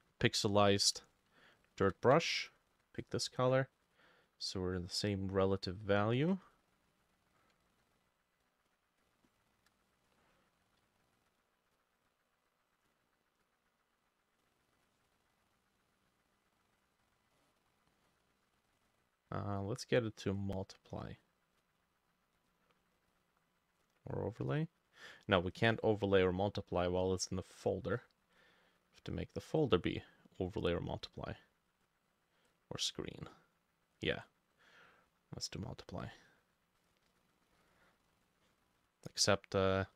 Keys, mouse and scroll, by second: 1.2 shift+click, 1.7 shift+click, 2.5 ctrl+click, 2.7 ctrl+click, 7.7 ctrl+z, 9.3 shift+click, 15.3 double click, 15.6 double click, 16.5 double click, 16.9 double click, 17.4 middle click, 18.3 double click, 18.6 double click, 38.3 double click.